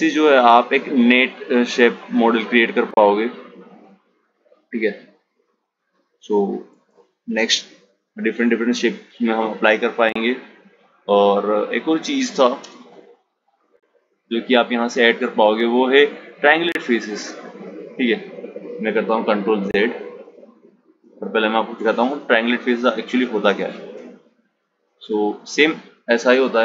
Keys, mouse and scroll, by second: 2.0 click, 3.4 click, 5.1 shift+a, 9.3 click, 10.8 Tab, 12.7-15.8 drag, 17.5 ctrl+z, 17.9 ctrl+z, 18.7 ctrl+z, 19.2 ctrl+z, 19.3 ctrl+z, 22.0 Tab, 25.5-26.6 drag.